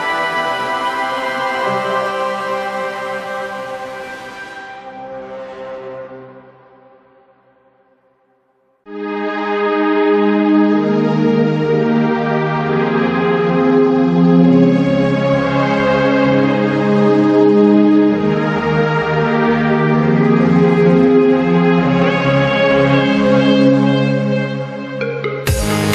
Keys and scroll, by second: 6.4 z, 7.0 ctrl+shift+Delete, 7.9 ctrl+z, 9.7-11.2 typing, 12.7 p, 18.7 v, 19.2 Down, 21.2 ctrl+v, 21.3 g, 22.4 Right, 22.4 Left, 24.7 z.